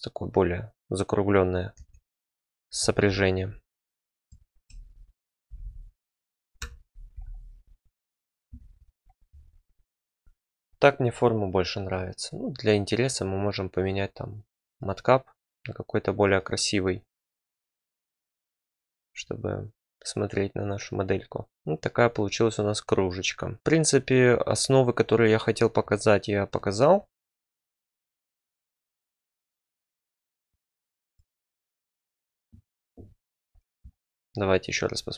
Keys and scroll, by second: 1.7 Tab, 5.4 g, 5.6 g, 6.6 Escape, 8.5 Tab.